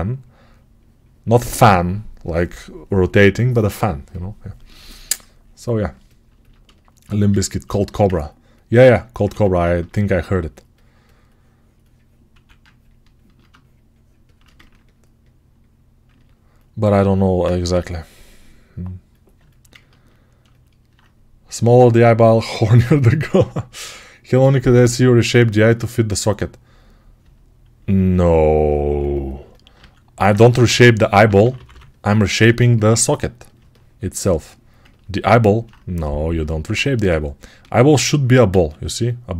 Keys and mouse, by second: 9.1 2, 12.2 1, 17.6 g, 19.2-22.7 alt+right drag, 27.7 alt+q, 30.5 g, 30.9-33.4 right drag, 30.9 ], 31.1 ], 33.4 alt+click, 33.9-39.3 ctrl+alt+right drag, 36.7 1, 38.4 alt+z.